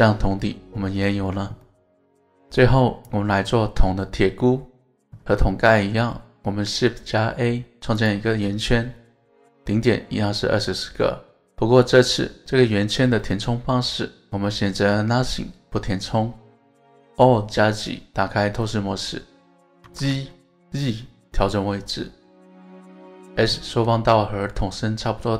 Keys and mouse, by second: 0.3-1.1 middle drag, 1.2 alt+z, 1.6-2.8 middle drag, 3.4-4.9 middle drag, 5.7 KP_1, 6.6 shift+a, 12.9-14.2 drag, 17.5 alt+z, 19.8 g, 20.1 z, 23.0 click.